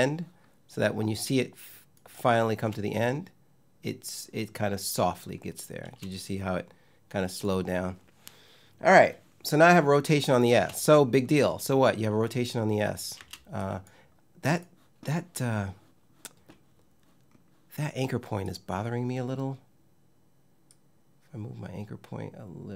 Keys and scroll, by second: 2.2 space, 5.5 space, 10.2 space, 12.8 space.